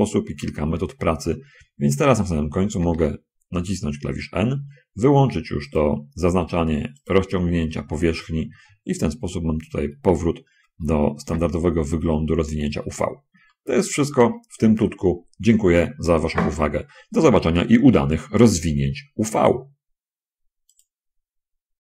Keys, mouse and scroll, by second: 0.0 middle click, 0.2-0.8 scroll down 2, 3.1 n, 6.0 click, 7.3 click, 11.4 n, 13.6-14.6 shift+drag, 21.0 click.